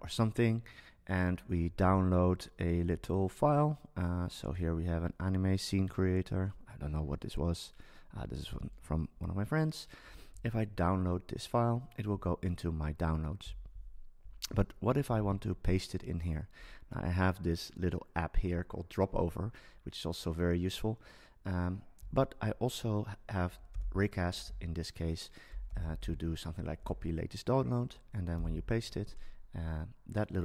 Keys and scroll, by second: 23.7 super+space, 25.5 BackSpace, 28.3 super+v.